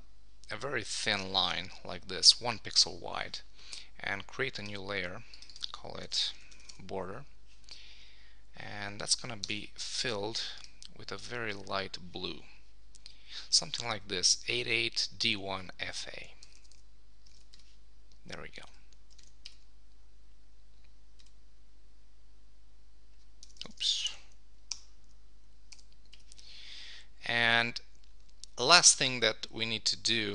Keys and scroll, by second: 6.7 Return, 9.4 shift+BackSpace, 16.4 Return, 17.4 super+d, 19.1 super+1, 24.7 Return.